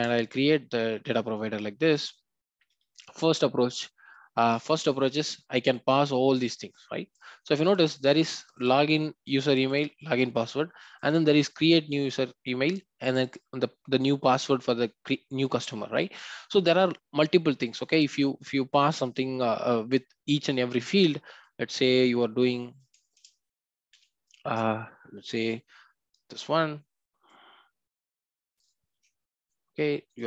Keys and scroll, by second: 28.9 ctrl+c.